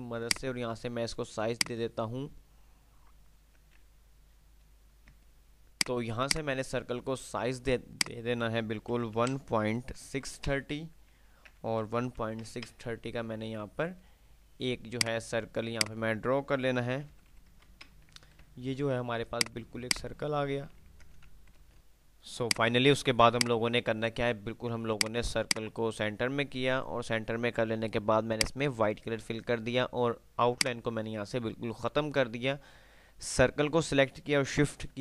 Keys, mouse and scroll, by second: 0.4-2.4 drag, 5.3 click, 7.9 click, 11.6 Tab, 15.1 click, 18.4 F3, 19.4-20.9 drag, 21.8 ctrl+F10, 21.8 click, 23.1 F2, 23.8 F2, 25.1-27.3 drag, 30.6 right click.